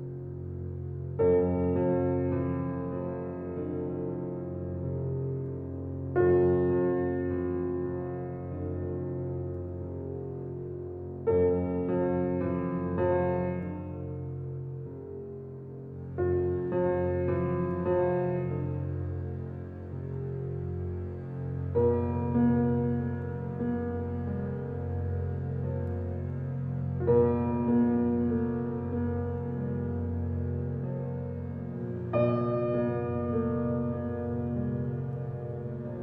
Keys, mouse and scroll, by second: 2.2 click, 5.5 9, 6.1 shift+', 8.2 click, 9.4 -, 9.9 scroll down 1, 13.4 click, 13.4 typing, 14.0-14.6 scroll up 2, 16.5 click, 16.8-17.6 scroll down 1, 19.9 click, 20.3-20.7 scroll up 1, 22.3 click, 22.9-23.6 scroll down 1, 23.6 scroll up 1, 24.7 click, 25.0 scroll down 1, 26.3 scroll up 1, 27.1 click, 27.4 scroll down 1, 28.1 click, 28.5-29.1 scroll up 1, 30.5 click, 33.5 click, 33.8-34.4 scroll down 1, 34.4 scroll up 1, 34.8 right click, 35.1-35.5 scroll down 1, 35.5 scroll up 1.